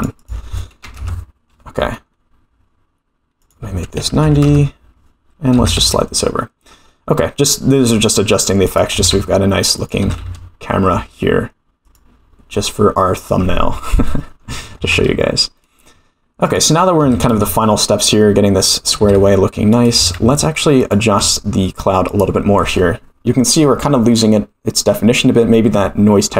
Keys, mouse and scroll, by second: 0.2 click, 3.4-5.0 drag, 5.5 g, 8.9 g, 10.0 g, 13.2 click, 14.7 g, 17.0 g, 19.0 g, 20.0 g, 22.1 click.